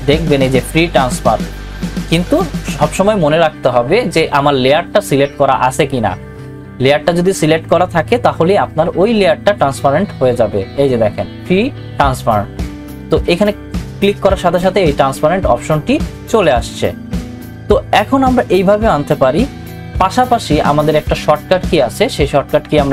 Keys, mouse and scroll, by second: 13.3 click.